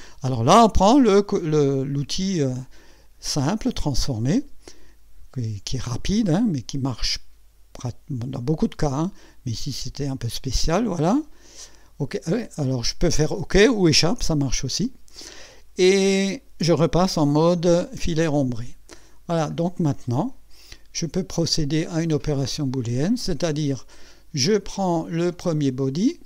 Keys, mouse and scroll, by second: 1.6 middle click, 3.7 click, 5.7-10.6 drag, 14.3 Escape, 15.4 click, 16.1-16.7 drag, 18.8 scroll up 1, 19.2-19.5 scroll down 1, 19.8-21.0 drag, 25.3 click.